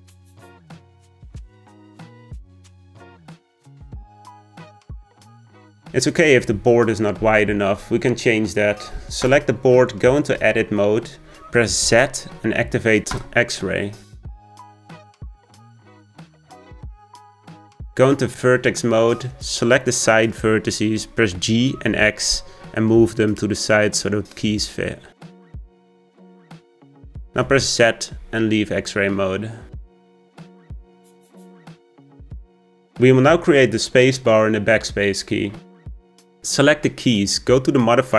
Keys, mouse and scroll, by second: 0.3 Tab, 1.0 g, 3.9 Tab, 4.3 s, 5.4 Tab, 5.8 g, 8.4 click, 11.5 click, 12.7 Tab, 14.1 z, 18.3-19.5 drag, 21.3 g, 27.4 z, 29.7-31.0 middle drag, 31.0-31.8 scroll down 2, 31.8 Tab, 32.2-32.9 shift+middle drag, 36.4 click.